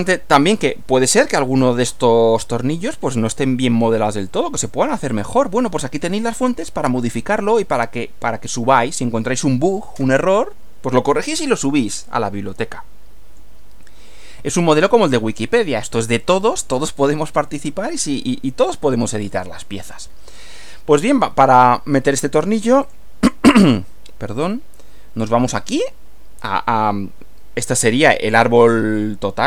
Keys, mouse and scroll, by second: 12.0-13.6 middle drag, 22.3 click, 22.9 click, 25.6 click.